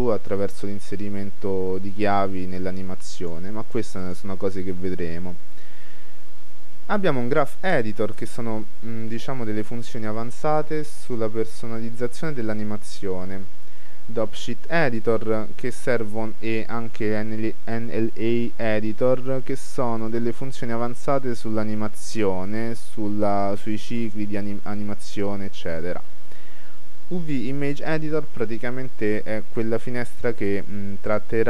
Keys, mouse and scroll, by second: 1.0-2.6 drag, 4.1-6.0 drag.